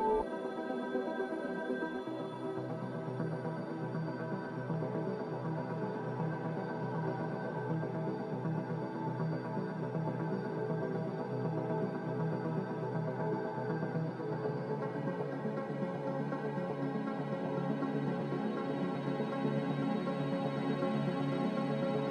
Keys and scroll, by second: 0.7-1.4 typing, 13.3 c.